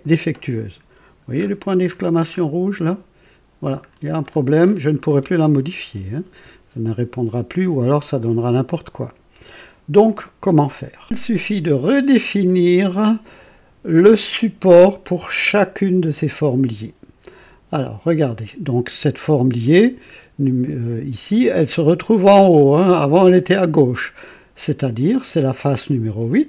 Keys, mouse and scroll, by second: 4.6-5.2 scroll down 4, 11.0 click, 12.4 click, 19.6-20.9 drag, 22.3-23.2 drag, 23.9-24.9 drag.